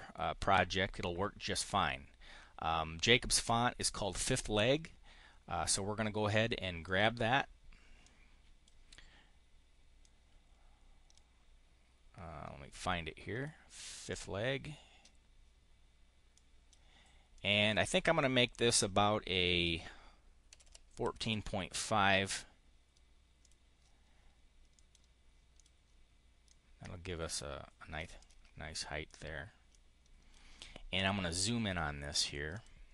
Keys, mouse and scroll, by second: 6.7 click, 7.9 click, 9.9-13.5 drag, 14.0 click, 16.2 click, 17.3 click, 20.1-21.6 typing, 23.3 click, 24.6 click, 25.3 click, 26.3-27.9 drag, 28.0 click, 28.9 click, 29.5 click, 32.0 click, 32.4 click.